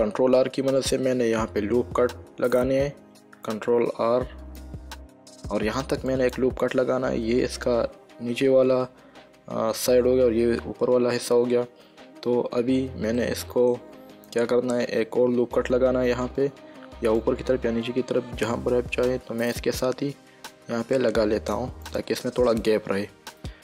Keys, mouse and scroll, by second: 1.9 ctrl+r, 3.0 middle click, 4.0 ctrl+r, 4.7 click, 6.4 click, 13.5 shift+middle click, 16.5 ctrl+r, 17.5 click, 22.2 click.